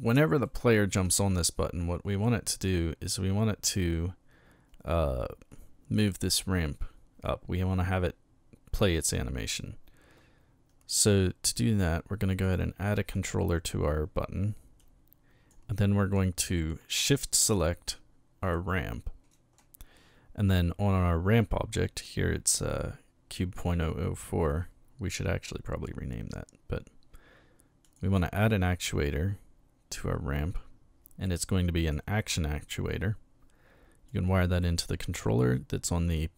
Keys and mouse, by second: 0.4-0.9 shift+middle drag, 12.4 click, 13.2 click, 14.8-15.5 drag, 18.4 shift+right click, 27.8 click, 31.8 click, 34.1-34.9 drag.